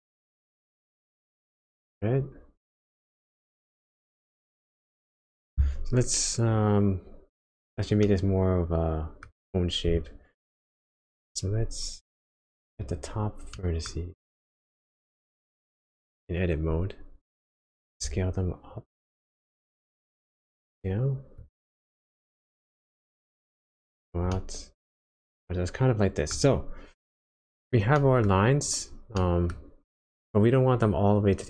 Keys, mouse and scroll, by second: 4.9 click, 8.0 middle click, 9.4-9.9 scroll up 2, 9.9 Tab, 10.5-11.0 scroll down 2, 12.8 click, 13.5 middle click, 14.1-14.8 scroll up 1, 14.8 click, 18.0 s, 22.1-23.8 scroll down 3, 23.8 Tab, 24.3 middle click, 26.4-26.8 scroll up 1, 27.9 middle click, 29.0 scroll up 1, 29.2 middle click.